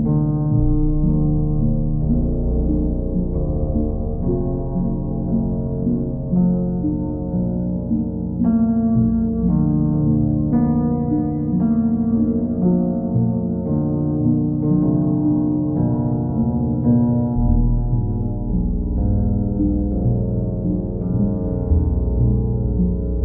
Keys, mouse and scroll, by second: 0.8 right click, 3.4-4.5 right drag, 5.2-6.3 drag, 7.0-8.0 drag, 13.3 click, 15.7 click, 16.1 shift+click, 16.9 click, 17.6 click, 17.9 shift+click, 19.8 ctrl+click, 20.4 ctrl+click, 21.1 ctrl+click, 21.5 w.